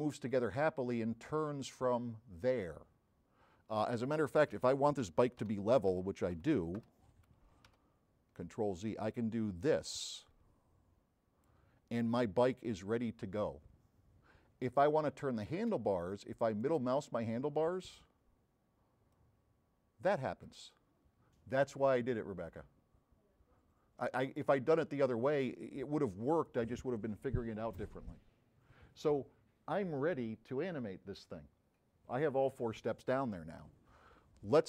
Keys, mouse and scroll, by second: 5.5 a, 9.1-11.6 drag, 11.9 scroll down 1, 12.1 middle click, 16.7 middle click, 18.1 c.